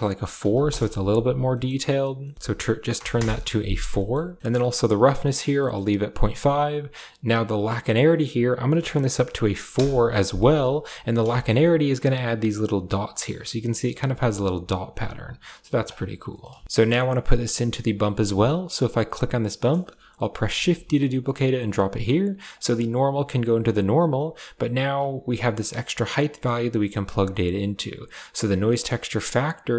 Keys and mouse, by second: 1.3 middle click, 2.0 middle click, 2.2 click, 3.8 middle click, 5.4 middle click, 7.9-9.6 drag, 10.8 middle drag, 11.2 shift+middle click, 14.5 click, 15.1 click, 19.0 click, 20.3 shift+d, 21.5 click, 22.3 click, 23.5 click, 27.3 drag, 28.6-29.7 drag.